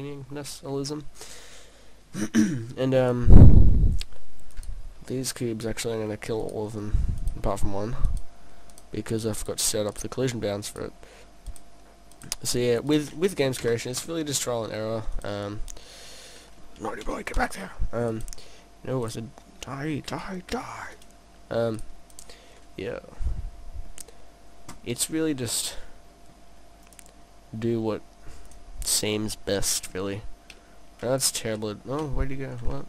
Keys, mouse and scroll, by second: 4.6 right click, 5.1 middle click, 6.5 shift+right click, 8.1 shift+right click, 8.8 shift+right click, 9.4 shift+right click, 10.0 shift+right click, 10.8 shift+right click, 11.5 shift+right click, 12.2 shift+right click, 12.9 shift+right click, 13.6 Delete, 15.2 right click, 15.5 middle click, 17.0 Delete, 17.5 click, 18.1 right click, 19.1 right click, 20.5 Delete, 21.8 right click, 22.1 right click, 23.4 middle click, 25.5 click, 26.9 click, 28.5 click, 29.1 middle click, 30.6 middle click.